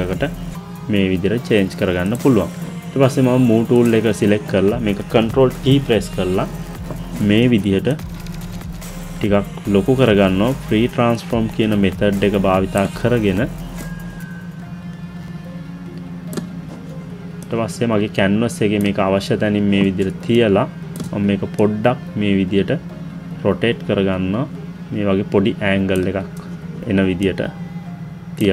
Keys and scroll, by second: 5.7 ctrl+t.